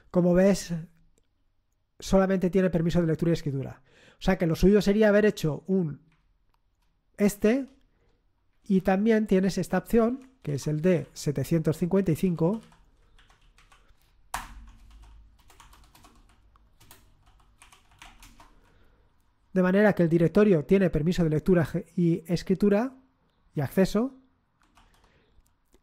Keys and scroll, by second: 5.2 Up, 5.6 Up, 6.1 Up, 8.6 Home, 8.9 Right, 9.4 Right, 9.5 Right, 10.1 Right, 10.4 BackSpace, 10.8 End, 11.0 Left, 11.5 Left, 11.6-11.9 Left, 12.2 Left, 12.3 Delete, 12.4 Delete, 12.6 Delete, 12.9-18.9 typing, 24.8 ctrl+l.